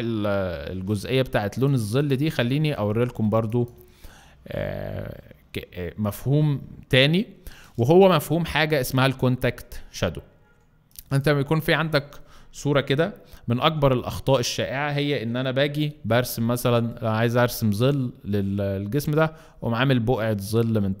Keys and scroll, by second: 13.7 b, 15.9 F3.